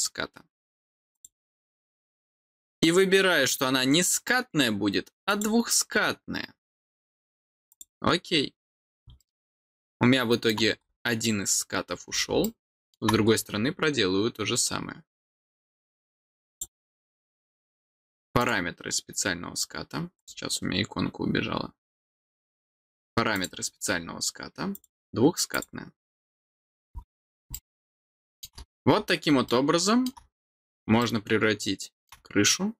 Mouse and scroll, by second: 5.2 click, 7.6 click, 9.1-10.4 middle drag, 10.8 scroll down 1, 11.8 scroll down 2, 12.4 middle click, 13.2-13.6 scroll down 2, 16.4 click, 18.3 click, 20.1 click, 23.3 click, 24.7 click, 25.5 click, 26.6 scroll down 1, 27.5 middle click, 28.6 scroll down 2, 29.4 middle click, 30.9-32.0 middle drag.